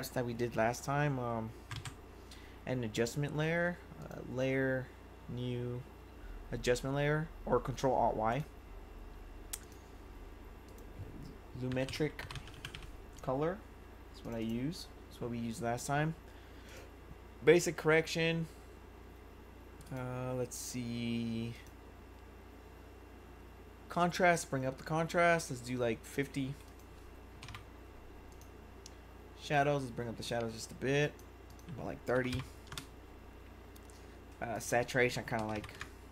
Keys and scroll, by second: 11.6-13.2 typing, 27.1-28.0 typing, 31.9-32.8 typing, 34.9-36.1 typing.